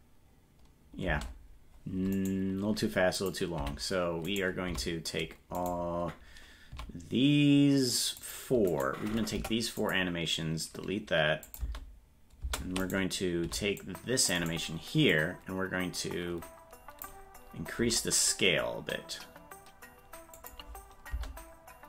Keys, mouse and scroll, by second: 2.2 right click, 3.2 click, 3.6 v, 4.3 right click, 4.7 c, 9.4 Delete, 11.5 click, 12.9 right click, 12.9 space, 13.5 c, 15.2-17.1 drag, 17.8 s.